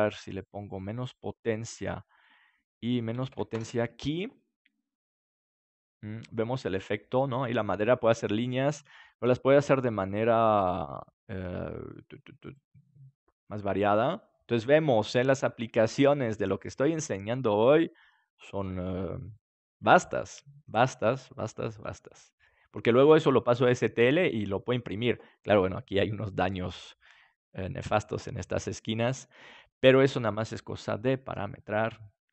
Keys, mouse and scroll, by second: 1.9-4.9 drag, 6.5-8.3 middle drag, 8.3-11.4 drag, 11.4-12.4 middle drag, 12.4-13.7 drag, 13.7-14.3 scroll up 1, 14.3-16.7 middle drag, 25.3 scroll down 1, 25.3-27.4 middle drag, 28.3 scroll down 1, 28.4-30.1 middle drag.